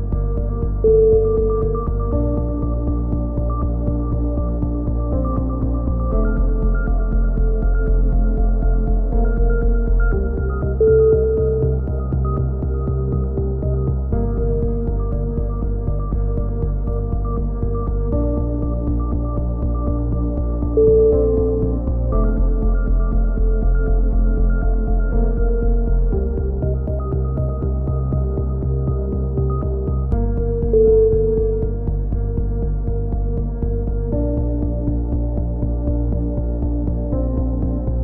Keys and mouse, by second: 0.2 Tab, 0.3 click, 1.1-2.1 typing, 1.6 Tab, 2.3 click, 3.8 click, 4.0 right click, 4.4 KP_3, 4.9 click, 5.5 z, 5.8 c, 6.0 right click, 6.2-9.3 drag, 6.8 a, 6.8 z, 9.3 right click, 9.5 KP_3, 9.8 click, 10.3 a, 10.4 z, 10.6 z, 12.0 ctrl+z, 12.0 a, 12.3 ctrl+z, 12.6 ctrl+z, 12.6 a, 12.8 a, 13.1 z, 13.3 click, 14.5 click, 14.6 KP_1, 15.8 click, 16.4-17.6 drag, 17.6 right click, 17.6 c, 18.1 click, 18.7 right click, 19.3 KP_7, 20.3 e, 21.4-26.3 drag, 25.5 right click, 26.7 right click, 27.0 click, 28.0 z, 28.1 a, 28.3 click, 29.5-30.9 right drag, 30.1-31.2 drag, 31.3 e, 31.7 click, 33.1 KP_7, 33.3 z, 33.9 e, 34.2 click, 35.4 right click, 35.5 click, 36.3 right click, 36.5 click, 37.3 right click, 37.4 click.